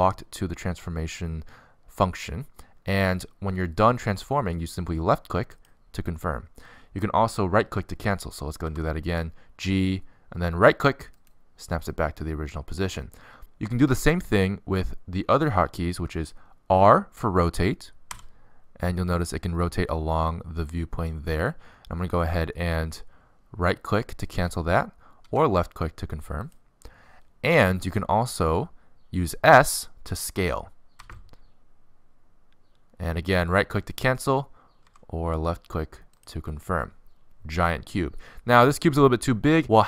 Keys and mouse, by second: 9.3 g, 18.4 r, 26.2 r, 31.4 s, 35.5 s.